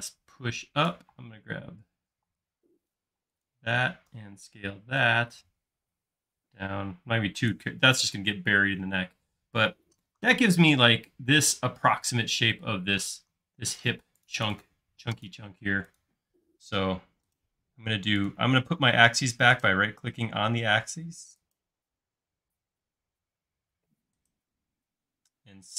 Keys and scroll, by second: 1.1 space, 2.1 p, 3.2 space, 4.1 s, 7.9 space.